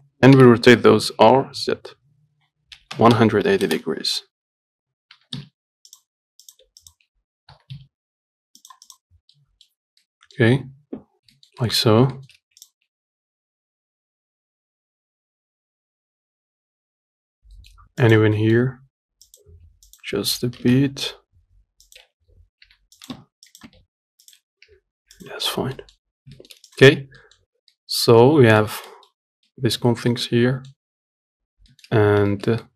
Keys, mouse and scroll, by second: 0.6 r, 4.8 scroll up 2, 5.4 g, 6.7 click, 7.1 shift+click, 7.8 g, 9.1 click, 9.4 scroll down 1, 9.6 middle click, 10.0 scroll up 1, 10.3 middle click, 10.7 scroll up 2, 11.6 shift+middle click, 12.1-12.4 scroll up 1, 12.4 shift+middle click, 12.9 click, 13.1 Tab, 13.3-16.8 typing, 13.6 middle click, 13.8 click, 14.1 Tab, 14.1 scroll down 3, 14.2 middle click, 14.3 scroll up 1, 14.5 Tab, 14.6 click, 15.4 click, 15.7 click, 16.1 click, 16.8 click, 17.1 scroll down 2, 17.2 Tab, 17.3 shift+middle click, 17.6 scroll up 1, 17.8 shift+middle click, 18.3 click, 18.5 Tab, 18.7 middle click, 19.5 click, 19.8 g, 22.1 click, 22.9 g, 23.4 Tab, 23.8 click, 23.9 Tab, 24.5 click, 24.9 g, 25.6 Tab, 25.8 scroll down 2, 26.0 middle click, 26.3-26.6 scroll up 2, 26.6 shift+middle click, 27.0 click, 27.2 scroll down 1, 27.5 middle click, 27.7-28.0 scroll up 4, 28.0 middle click, 28.9 scroll down 2, 29.2 middle click, 29.5-29.8 scroll up 3, 29.8 middle click, 30.1-30.4 scroll down 2, 30.4 middle click, 31.1-31.4 scroll up 1, 31.4 scroll down 1, 31.7-32.0 scroll up 1, 32.0 shift+middle click, 32.3 scroll up 1, 32.6 shift+middle click.